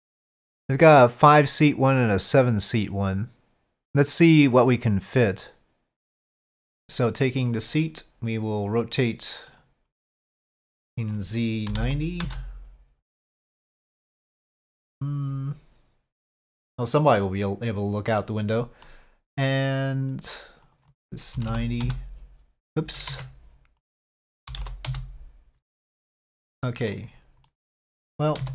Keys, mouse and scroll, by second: 7.5 click, 9.5-10.6 drag, 10.8-13.1 drag, 14.7-18.2 middle drag, 18.8-19.7 middle drag, 20.6-23.0 drag, 23.1 ctrl+z, 23.9-25.6 drag, 26.5-26.9 middle drag, 27.4-28.0 middle drag, 28.4 z.